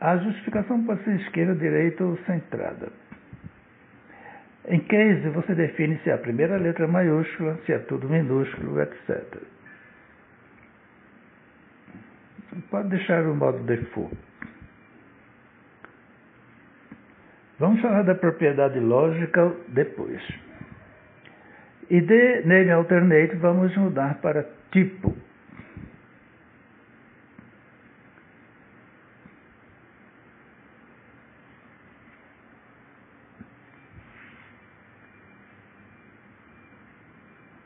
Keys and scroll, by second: 28.8-30.2 typing, 36.7 Return.